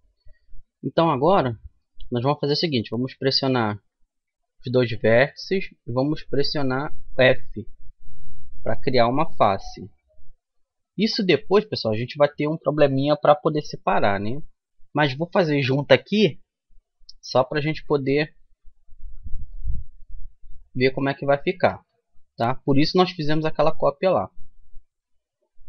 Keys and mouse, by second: 3.5 right click, 5.0 f, 6.1-12.3 right drag, 8.2 f, 11.6 f, 19.5-24.5 right drag, 24.5-25.6 middle drag.